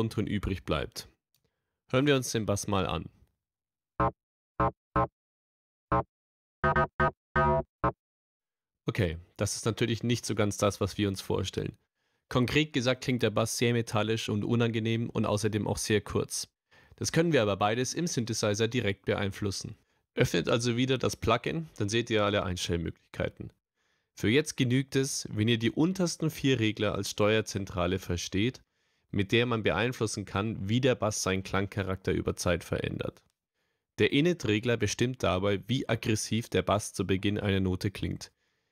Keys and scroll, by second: 1.0 BackSpace, 3.7 space, 7.8 space.